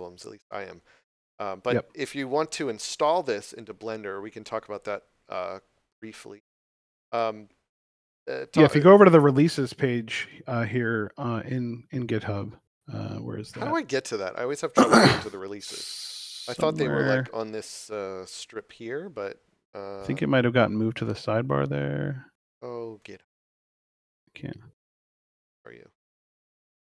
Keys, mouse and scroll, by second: 2.9 click, 11.3 scroll down 1, 12.9 scroll up 1, 19.1-20.0 scroll down 2, 20.0-20.6 scroll up 3, 21.9-23.7 scroll down 2, 23.7 click, 26.2 scroll down 1.